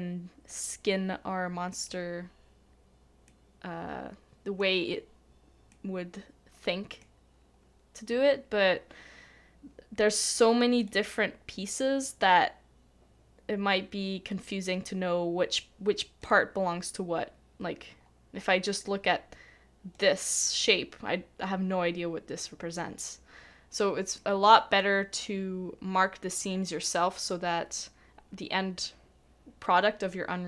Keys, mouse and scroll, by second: 3.2 middle click, 18.0 middle click, 18.1 scroll up 1, 18.3 scroll down 1, 18.4 scroll up 1, 18.4 scroll down 1, 18.5-20.3 scroll up 1, 20.3 scroll down 1, 24.1-26.2 scroll down 1, 27.7 middle click.